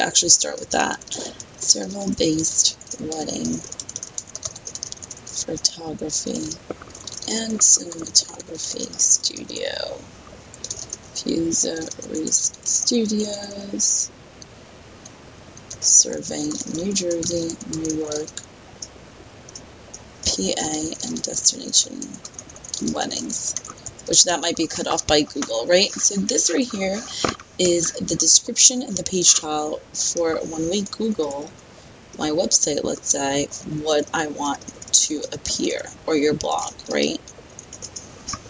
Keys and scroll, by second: 0.4 BackSpace, 2.2-4.4 typing, 6.5 space, 7.2 space, 9.2 space, 10.8 space, 12.0 space, 12.9 space, 15.7 space, 16.6 space, 17.5 space, 18.1 space, 20.9-21.3 space, 23.5 space, 24.2 space, 32.1 Return, 34.5-38.4 typing, 37.8 Return.